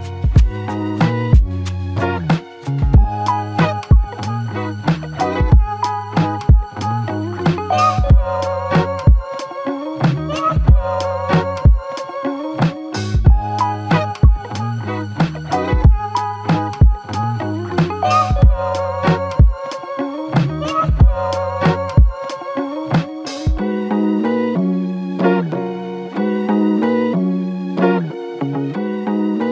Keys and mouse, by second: 0.8 alt+shift+click, 2.7 double click, 11.2 f, 12.4 alt+click, 20.3 shift+click, 21.5 shift+click, 24.0 ctrl+click, 25.9 ctrl+click, 26.8 ctrl+click.